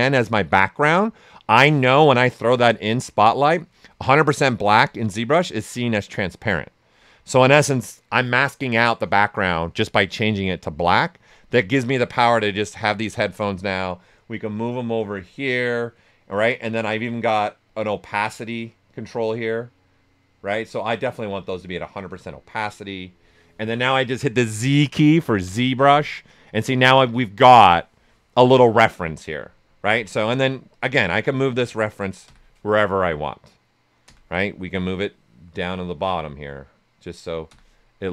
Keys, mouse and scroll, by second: 11.7-18.7 ctrl+drag, 18.7-25.4 ctrl+drag, 25.4 ctrl+z, 29.8 ctrl+z, 30.7-32.2 ctrl+drag, 32.2 ctrl+z, 34.9-38.1 ctrl+drag.